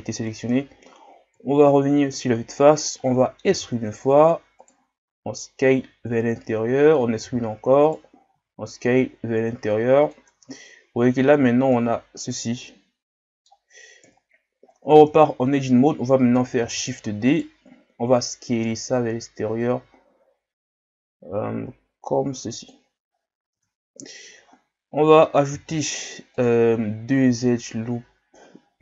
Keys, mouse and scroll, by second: 0.5 KP_1, 1.4 KP_1, 2.1 scroll up 1, 3.5 e, 5.1 s, 7.3 e, 8.4 s, 10.4 Tab, 11.0 scroll down 4, 11.3 a, 11.7-14.0 middle drag, 14.0 KP_1, 14.6 scroll up 1, 14.9 Tab, 16.6 shift+d, 18.5 s, 23.1 scroll up 2, 23.6 Tab, 24.2 Tab, 25.5 ctrl+r.